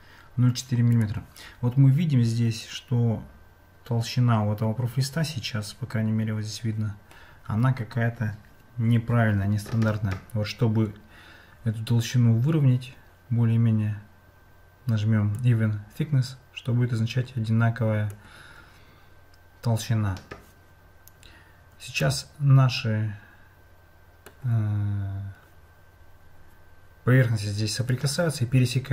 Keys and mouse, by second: 15.4-18.1 drag, 22.0-24.3 middle drag.